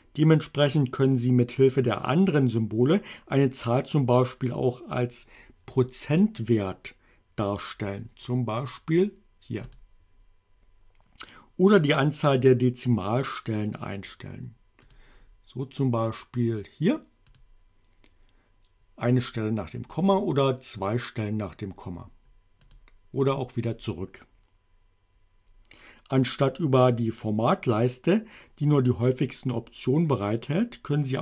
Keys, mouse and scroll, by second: 9.7 click, 14.9 click, 17.4 click, 20.0 click, 22.8 click, 23.3 click.